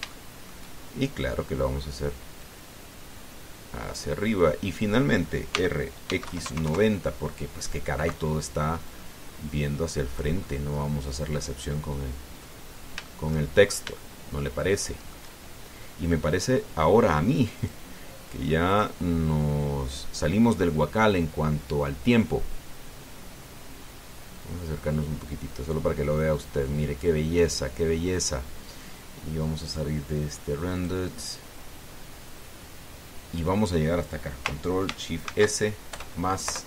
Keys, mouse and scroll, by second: 0.4 middle click, 0.4-0.8 scroll up 2, 0.9 shift+middle click, 1.6 shift+scroll up 2, 3.2-4.9 drag, 6.3 r, 6.9 x, 7.0 KP_9, 7.2 KP_0, 7.4 KP_Enter, 9.6-11.2 drag, 11.3-13.3 middle drag, 13.4 scroll down 1, 13.8 shift+middle click, 14.2-14.6 shift+scroll up 1, 14.7-16.1 shift+middle drag, 18.4 click, 19.4 click, 24.6 scroll up 2, 28.3-28.6 scroll down 2, 30.4 click, 31.6 click, 32.4-32.7 scroll down 2, 36.0 ctrl+shift+s.